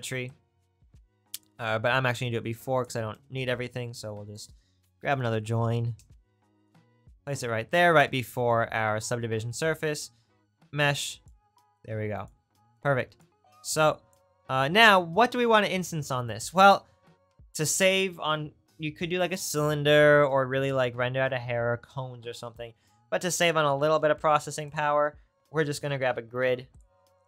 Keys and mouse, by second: 3.5 shift+a, 7.2-14.4 right drag, 10.0-14.4 drag, 23.9 shift+a.